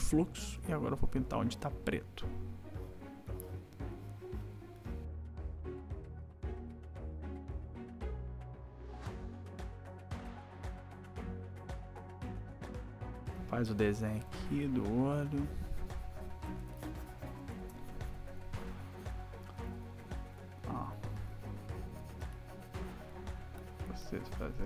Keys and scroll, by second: 0.4 ], 5.6 \, 6.4 \, 7.2 ], 7.8 \, 9.2 ], 10.0 ], 10.6 ], 13.3 \, 16.5 \, 21.2 ].